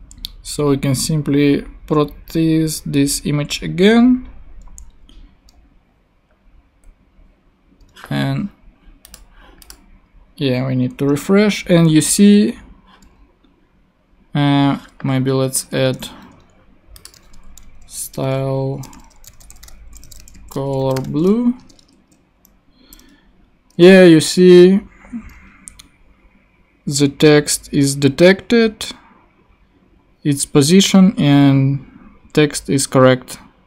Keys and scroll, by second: 15.8 ctrl+Tab, 17.1 space, 17.3 s, 18.0 Return, 18.7-21.5 typing, 21.7 super+Tab.